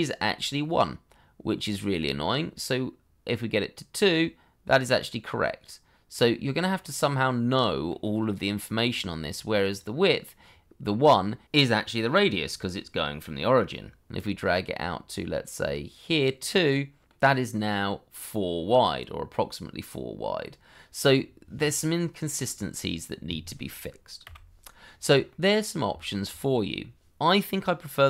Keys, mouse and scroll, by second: 6.5-6.9 scroll down 1, 6.9 middle click, 10.4-12.4 scroll up 1, 15.6 middle click, 21.1-21.5 scroll down 1, 21.5 middle click, 23.0-24.2 scroll up 1, 24.2 Delete, 25.3 middle click, 25.9 shift+middle click, 26.3-28.0 scroll up 1.